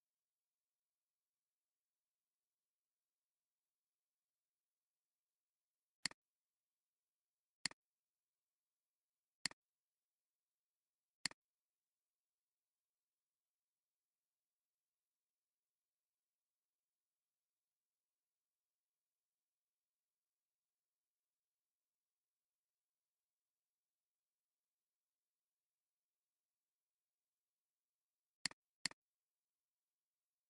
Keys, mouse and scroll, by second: 9.5 shift+click, 28.8 double click, 30.0 alt+scroll up 1.